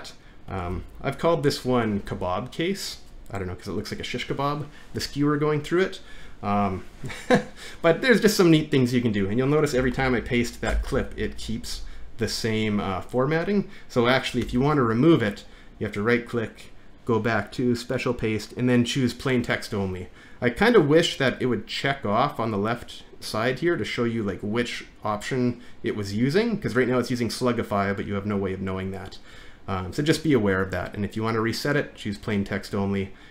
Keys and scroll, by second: 0.7 ctrl+v, 9.8 Return, 10.0 ctrl+v, 10.7 Return, 11.0 ctrl+v, 14.5 alt+`.